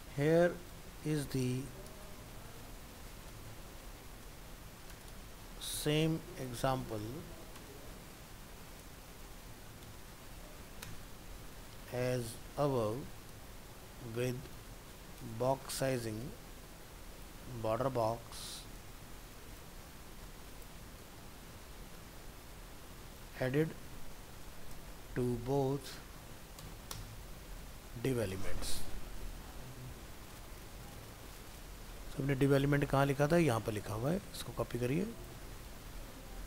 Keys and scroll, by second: 18.7 ctrl+c, 21.0 ctrl+v, 35.6 ctrl+c.